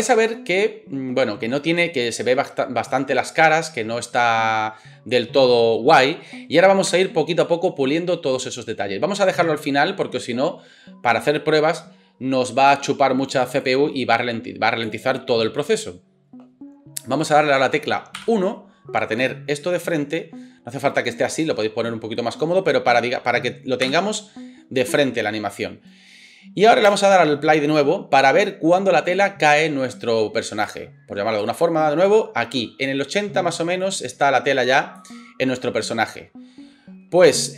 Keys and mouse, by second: 6.9 space, 18.2 KP_1, 23.8 KP_1, 26.9 space, 30.7 space.